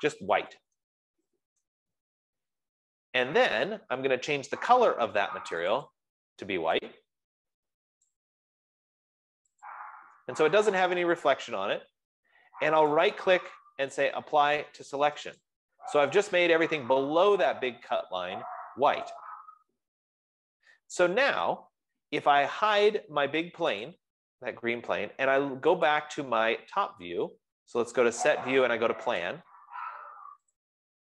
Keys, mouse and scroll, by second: 0.6-2.4 typing, 2.0 Return, 6.1 click, 6.3 click, 8.5 click, 10.4 click, 11.3 scroll, 13.6 right click, 16.0 click, 22.4 click, 23.4-31.0 drag, 30.9 F15.